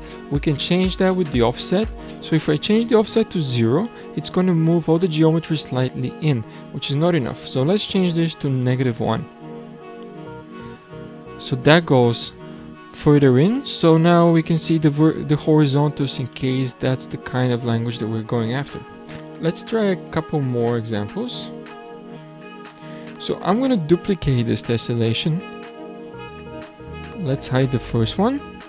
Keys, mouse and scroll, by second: 1.4-4.6 drag, 6.9-9.9 drag, 12.7-13.1 scroll up 3, 13.1-13.5 scroll down 7, 13.6-15.0 middle drag, 15.0-15.5 scroll up 7, 16.3-19.1 middle drag, 20.0 click, 21.8-24.8 drag, 25.5 shift+d, 27.7 click.